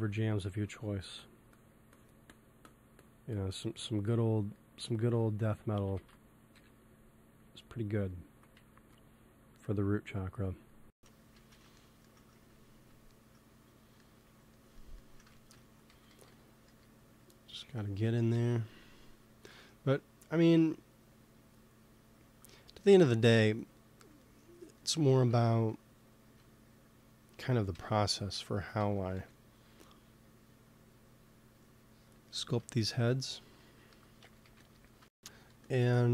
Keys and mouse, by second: 0.4 f, 1.1-6.2 drag, 5.8 ctrl+z, 6.0 ctrl+z, 6.4 KP_1, 8.4 g, 8.6 f, 9.4-11.0 drag, 11.4 ctrl+z, 14.0-15.0 middle drag, 15.9 g, 16.0 f, 16.6 f, 17.2-18.7 drag, 18.2 KP_1, 20.4-23.3 drag, 22.4 middle click, 23.3-24.5 middle drag, 25.4 f, 26.1 f, 26.8 click, 27.6 KP_1, 28.8 ctrl+z, 29.0 f, 29.6 f, 33.8 p, 34.3 f, 35.4 f, 35.9-36.1 drag.